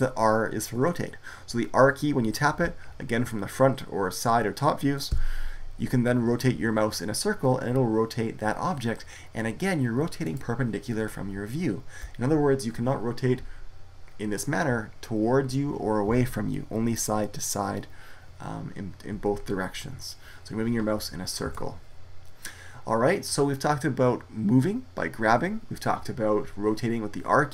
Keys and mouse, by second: 5.0 r, 19.0 r.